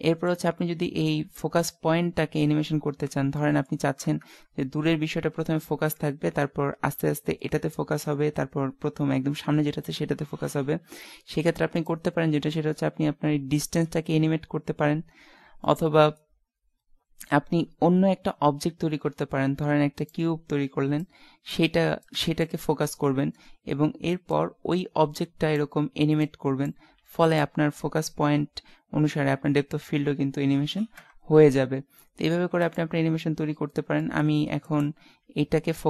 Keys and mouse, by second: 4.2 KP_0, 11.8-13.5 drag, 15.3 middle click, 15.7-17.4 middle drag, 18.9 shift+a, 21.1-22.6 drag, 22.6-24.0 middle drag, 25.0-26.2 drag, 27.0 x, 31.0 KP_0, 32.6 ctrl+s, 35.8 z.